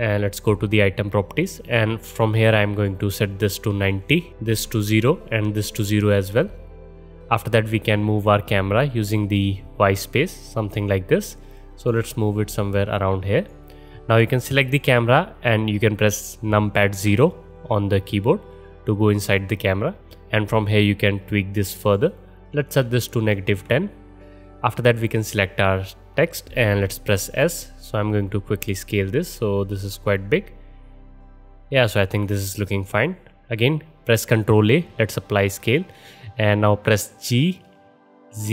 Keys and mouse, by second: 0.3 click, 1.2-2.7 middle drag, 2.7-14.2 drag, 14.2-14.6 middle drag, 14.6-17.1 drag, 17.1 middle click, 17.1 KP_0, 17.2 click, 17.3-20.6 middle drag, 20.6-25.0 drag, 25.0-36.7 middle drag, 27.3 s, 33.3 ctrl+a, 37.2 g.